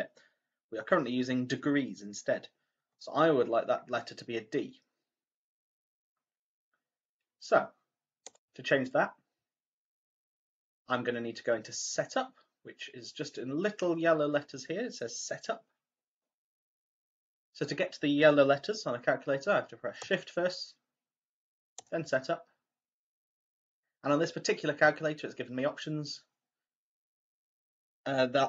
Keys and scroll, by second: 21.7 shift+Menu.